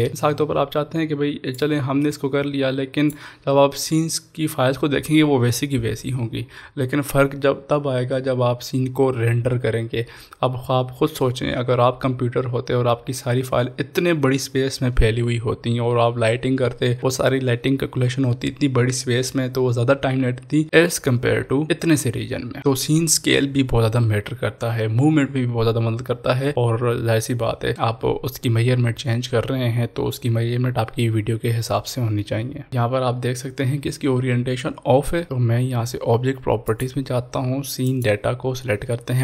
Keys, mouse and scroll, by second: 1.8 click, 1.9-4.2 drag, 4.2 scroll up 1, 9.2 scroll up 1, 9.3 scroll down 1, 20.0 scroll down 1, 20.1 scroll up 1, 32.7 click, 34.8 scroll up 1, 36.7 scroll up 1, 36.7 click.